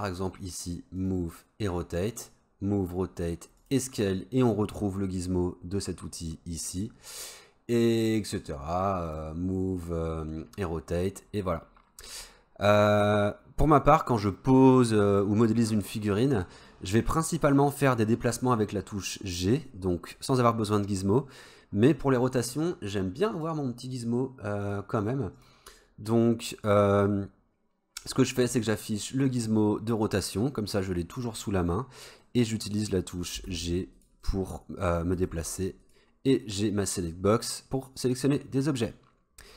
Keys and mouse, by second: 8.0-11.4 drag, 23.5-27.3 drag, 32.2 middle click, 33.5 g, 34.2-35.0 middle drag, 35.2 g, 36.4-38.2 drag.